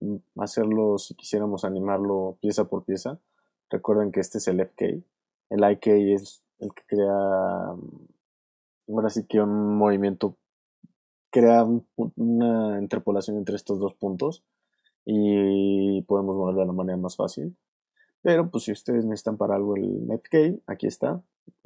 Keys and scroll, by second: 4.0 super+z, 17.2 super+z.